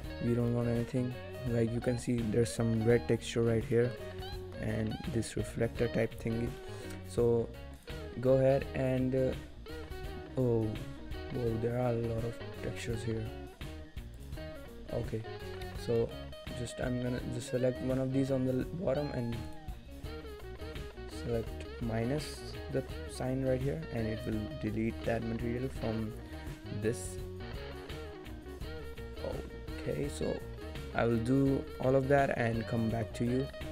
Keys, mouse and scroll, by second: 0.2 scroll up 1, 1.0 middle click, 1.0 scroll down 2, 2.6 middle click, 2.9-4.2 shift+scroll up 4, 3.4 shift+middle click, 4.2 shift+middle click, 4.2-4.7 scroll down 1, 4.7 middle click, 5.5-5.9 scroll down 6, 5.9 middle click, 6.2 scroll down 1, 6.4 shift+middle click, 6.6 middle click, 7.8 click, 8.9-10.2 scroll down 26, 10.2-11.0 scroll up 21, 11.5 scroll down 1, 11.6-12.2 scroll down 4, 12.6-13.3 scroll down 6, 13.7-14.2 scroll down 11, 14.2 click, 14.2 scroll down 1, 15.5 middle click, 16.1 shift+middle click, 19.5 click, 30.9 scroll down 2, 31.2 middle click, 31.4 scroll up 4, 31.9 shift+middle click, 32.5 middle click.